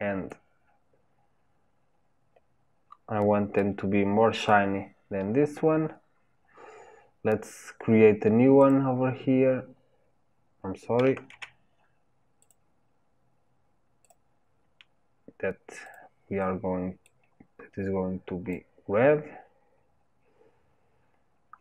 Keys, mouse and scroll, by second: 3.3-4.5 drag, 8.7-11.4 drag, 11.4 ctrl+z, 12.5-14.7 drag, 17.1 click.